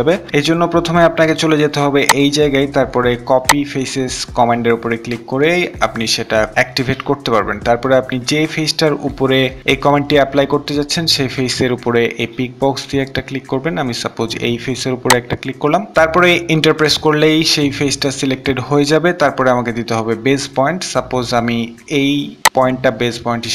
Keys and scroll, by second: 16.1 Return.